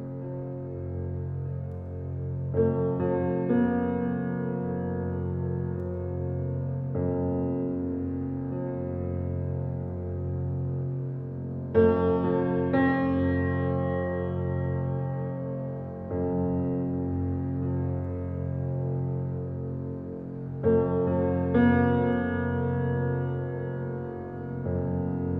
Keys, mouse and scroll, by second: 0.3 click, 0.6 click, 4.6 p, 5.5 Tab, 5.8 click, 6.1 Tab, 6.4 alt+middle click, 6.8 alt+middle click, 7.1 scroll up 1, 7.3 shift+middle click, 7.8 ctrl+r, 11.9 click, 12.4 shift+click, 12.8 s, 16.5 click, 17.0 shift+click, 17.7 s, 20.8 ctrl+r, 23.9 ctrl+r.